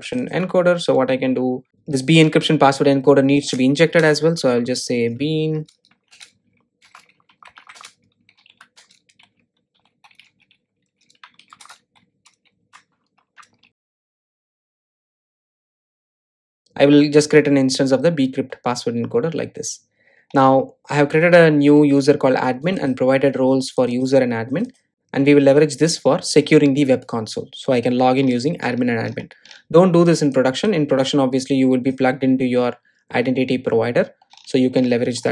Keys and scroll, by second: 1.7 super+z, 6.0 Return.